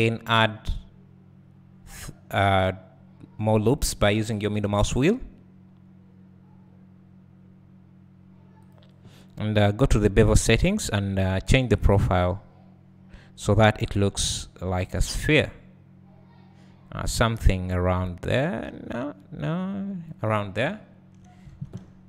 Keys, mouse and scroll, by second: 12.0-22.0 drag, 21.5 alt+a, 21.8 alt+`.